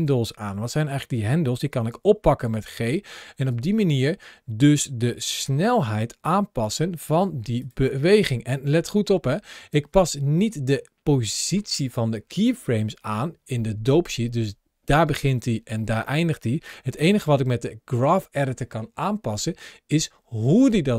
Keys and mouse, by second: 1.7 g, 7.5 click, 9.4 ctrl+shift+a.